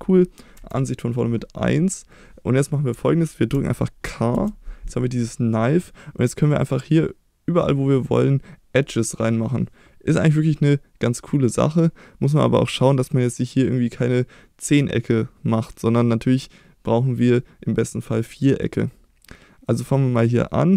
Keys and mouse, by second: 0.5 KP_1, 3.0-3.5 shift+middle drag, 4.3 k.